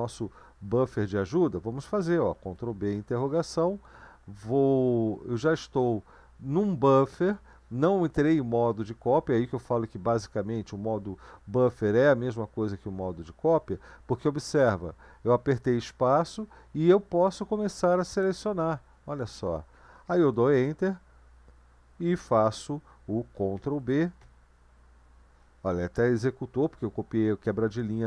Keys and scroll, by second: 2.3 ctrl+b, 2.9 ctrl+b, 24.2 ].